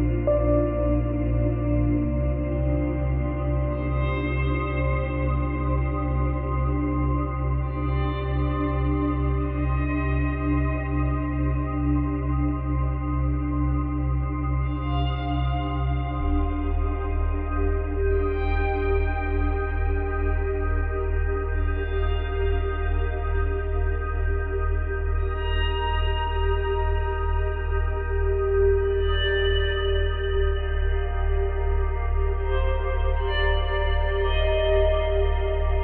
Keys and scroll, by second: 21.3 space, 25.1 space, 25.3 ctrl+z, 26.0 ctrl+z, 32.0 space, 35.5 space.